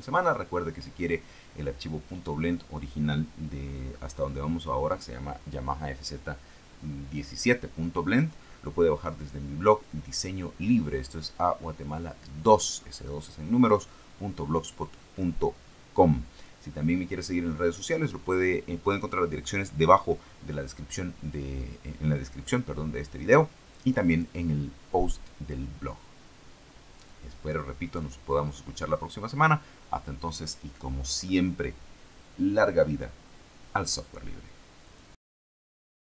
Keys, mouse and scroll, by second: 34.7 click, 36.0 click.